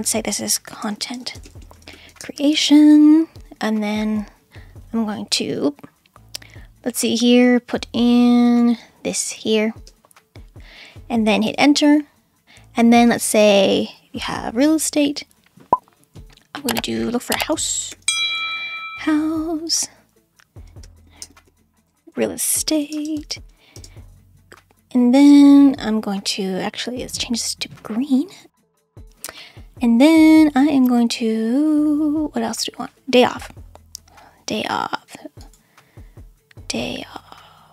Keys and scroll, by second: 0.3-3.0 typing, 9.7 space, 11.5 Return, 17.7-18.9 typing, 20.8-23.8 typing.